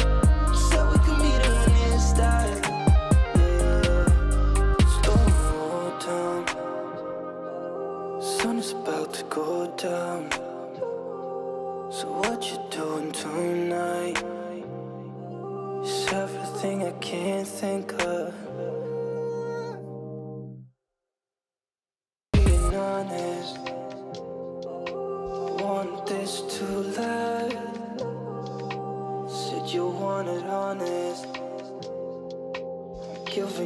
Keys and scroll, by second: 5.6 ctrl+space, 11.2 ctrl+space, 16.6 ctrl+space, 28.2 ctrl+space, 30.4 ctrl+;.